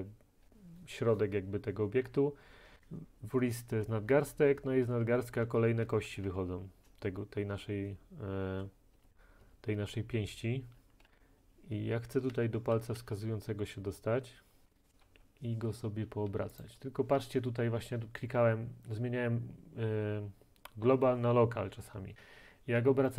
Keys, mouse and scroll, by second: 2.1 Down, 4.1 Down, 4.9 Down, 5.2 Down, 5.5 Down, 6.3 Up, 9.0 Down, 9.1 Down, 9.4 Down, 9.8 Down, 11.1 Up, 12.3 Right, 12.8 Down, 13.0 Right, 16.7-21.7 middle drag.